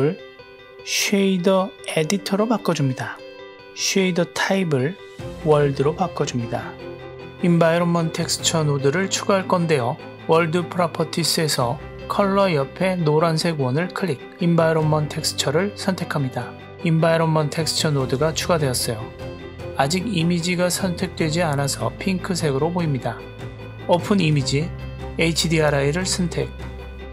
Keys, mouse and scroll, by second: 1.0-3.4 drag, 4.1 middle click, 5.0-6.4 drag, 7.0-7.4 middle drag, 8.4 n, 9.5 middle click, 12.0-14.9 drag, 16.3 click, 16.8-17.5 drag, 17.8-23.0 drag, 24.0 click.